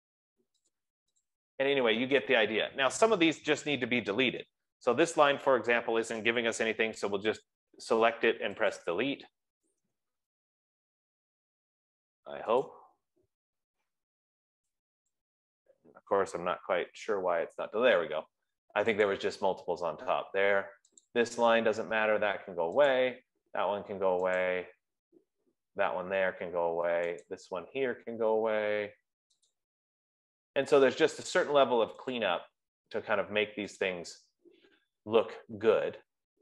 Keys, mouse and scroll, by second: 0.6 click, 1.0 click, 1.6 click, 2.2 F15, 5.8 click, 9.3 click, 13.0 right click, 15.5 click, 17.3 BackSpace, 19.6 click, 20.1 BackSpace, 21.7 click, 21.9 BackSpace, 24.7 click, 26.4 BackSpace, 27.7 click, 28.5 BackSpace, 30.0 click, 30.5 BackSpace, 32.6 click, 33.0 BackSpace, 34.2 click, 34.5 BackSpace.